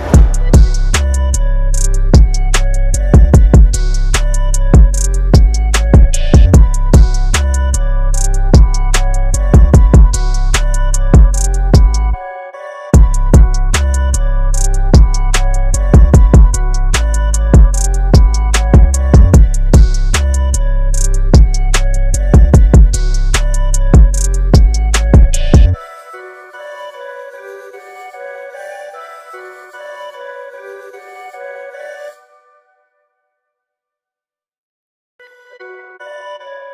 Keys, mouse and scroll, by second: 7.1 scroll down 1, 7.3 click, 9.8 space, 10.2 click, 10.3 space, 13.7 space, 13.8 click, 17.1 click, 19.9 click, 22.6 click, 26.0 space, 26.2 click, 26.4 space, 27.7 scroll up 1, 28.6 alt+scroll up 2, 30.2 click, 33.2 click.